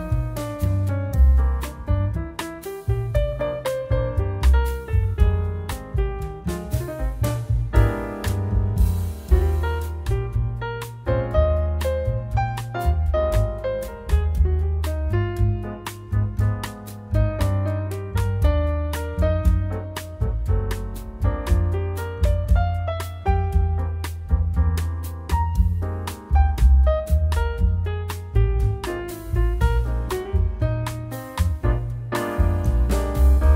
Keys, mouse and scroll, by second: 0.1 middle click, 1.0 scroll down 2, 1.2 middle click, 1.6-2.1 scroll up 2, 1.8 middle click, 2.3 click, 3.0 click, 3.4 middle click, 4.8 ctrl+click, 6.7 ctrl+click, 7.6 click, 10.4 click, 11.0-11.3 scroll down 2, 11.2 scroll up 1, 11.5 middle click, 12.1 click, 13.1 scroll down 2, 13.2-13.6 scroll up 12, 13.5 middle click, 13.9-14.3 scroll down 2, 14.0 middle click, 14.5 shift+middle click, 14.9 middle click, 15.3 shift+middle click, 15.7 scroll up 1, 16.1 click, 16.4 middle click, 18.3 click, 19.3 click, 20.1 click, 20.7 click, 21.2 click, 21.4-21.9 scroll down 7, 21.9 shift+middle click, 22.2 scroll up 2, 22.6-23.1 scroll down 3, 22.9 middle click, 23.7 click, 24.2-24.9 scroll up 6, 24.5 middle click, 25.4 click, 25.9 click, 26.9 scroll up 4, 27.2 middle click, 28.1 scroll down 1, 28.7 click, 28.9 middle click, 30.3 click, 30.7 click, 30.9 shift+a.